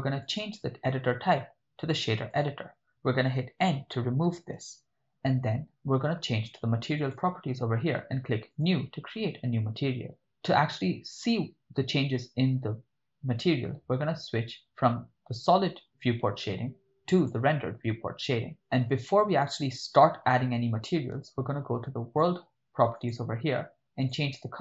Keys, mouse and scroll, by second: 0.2-2.5 drag, 4.2 n, 7.0 click, 8.5 click, 10.1 ctrl+middle click, 17.6 click, 23.0 click, 24.0 click.